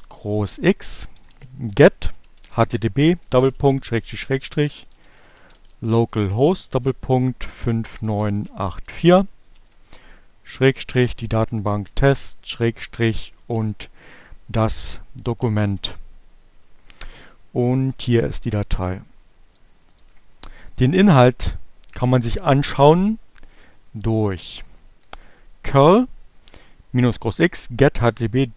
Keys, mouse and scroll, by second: 0.0-11.0 typing, 12.4-13.5 typing, 15.4 shift+Return, 17.8-19.0 drag, 19.0 click, 23.1 Up.